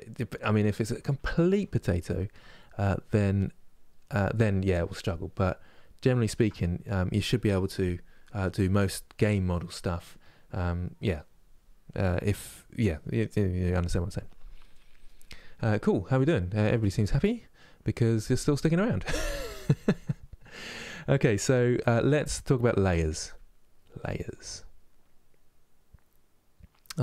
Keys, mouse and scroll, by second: 2.8 click, 3.7-27.0 middle drag.